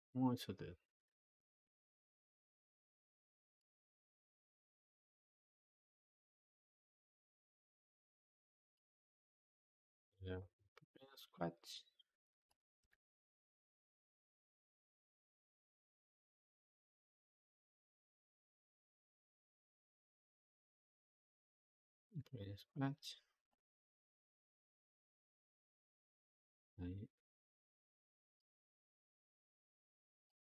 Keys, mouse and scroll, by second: 4.2-7.2 drag, 9.3 g, 11.2-12.4 drag, 12.7 g, 15.7 click, 15.9 g, 18.4-22.0 drag, 22.0 g, 23.3-25.3 drag, 25.3 g, 28.4-30.4 drag.